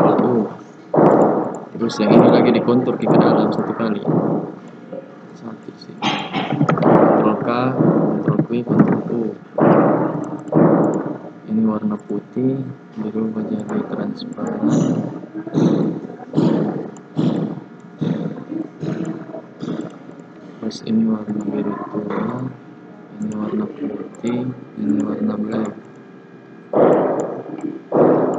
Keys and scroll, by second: 7.2 ctrl+k, 8.2 ctrl+q, 8.7 ctrl+u.